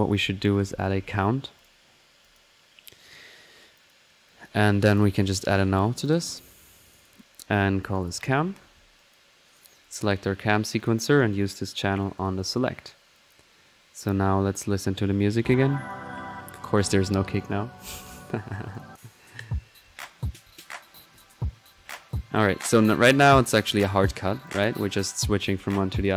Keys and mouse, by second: 0.0 right click, 0.2-1.3 typing, 1.6 click, 2.3 click, 3.7-5.4 drag, 6.1-7.1 drag, 7.4 alt+click, 8.8 typing, 9.0-10.4 drag, 10.8-12.5 drag, 13.0-13.4 typing, 13.1 click, 13.5 drag, 15.3 click, 15.7 click, 16.6 middle click, 16.8 click, 17.4 click, 17.8-18.7 middle drag, 18.7 click, 19.2-20.3 middle drag, 20.7 click, 23.5 typing, 24.4 click, 25.7-26.1 drag.